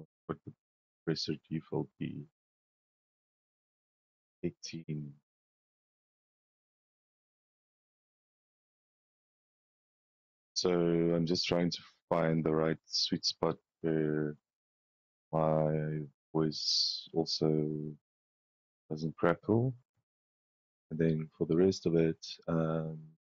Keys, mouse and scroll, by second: 0.6 click, 1.8 click, 3.2 click, 5.3 click, 7.6 click, 10.0 click, 14.6 middle click, 15.1 scroll down 1, 15.2 scroll up 1, 15.5 scroll down 1, 15.8 scroll up 1, 16.2-16.7 scroll down 2, 16.9 middle click, 17.9-18.5 scroll down 4, 21.2 scroll down 2, 21.8 scroll down 2.